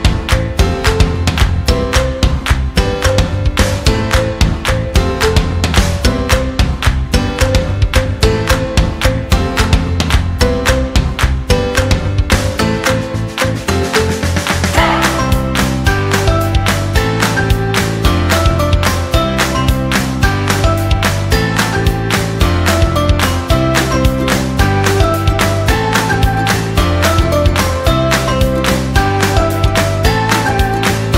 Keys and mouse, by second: 0.9 g, 3.2 g, 5.1 right click, 6.7 alt+z, 10.3 Tab, 10.8 middle click, 11.7 Tab, 12.0 ctrl+r, 12.6 KP_3, 13.3 s, 14.3 Tab, 14.8-15.1 shift+middle drag, 15.3 middle drag, 15.9 shift+middle drag, 16.3-16.7 middle drag, 17.2 Tab, 17.5-18.7 middle drag, 19.7 shift+right click, 20.6 middle click, 21.3 g, 23.5 middle click, 24.6 ctrl+r, 25.5-26.0 middle drag, 27.1 middle click, 28.6 middle click, 29.1 g, 30.3 middle click.